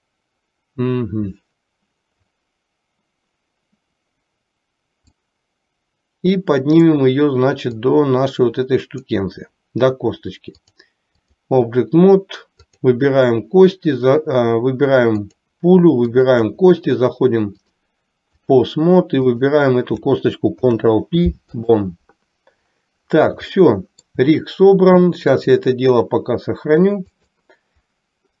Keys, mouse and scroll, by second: 5.3-7.0 drag, 7.9-9.3 drag, 10.7 click, 12.7 click, 15.4 click, 16.2 shift+click, 17.8-18.8 drag, 19.4 click, 20.7 ctrl+p, 23.7-24.3 shift+middle drag, 25.5-27.5 drag.